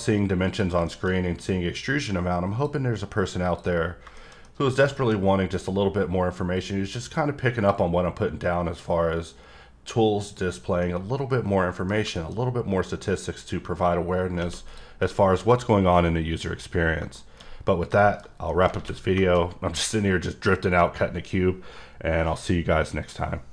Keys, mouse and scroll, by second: 0.5 click, 0.9 middle click, 1.8 click, 3.4 click, 3.8 scroll down 2, 4.2 middle click, 4.3 scroll down 1, 4.4 middle click, 4.9 middle click, 5.2-6.5 scroll up 3, 6.5 click, 10.2 click, 10.8 middle click, 11.9 scroll down 1, 12.1 middle click, 12.3-13.0 scroll up 2, 13.0-14.4 drag, 15.0 middle click, 17.1 middle click, 17.6-18.0 scroll down 2, 18.0 middle click, 18.2 scroll down 2, 18.5 middle click, 19.2 middle click.